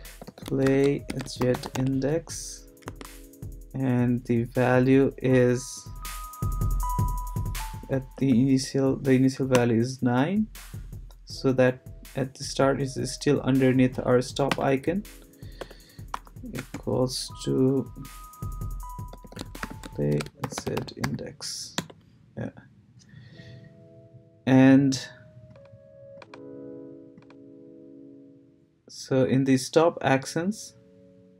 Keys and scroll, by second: 0.0-2.6 typing, 2.9 Tab, 8.1 9, 9.5 Return, 15.6 shift+Return, 16.1 =, 16.6 space, 18.9-21.5 typing, 21.8 Return.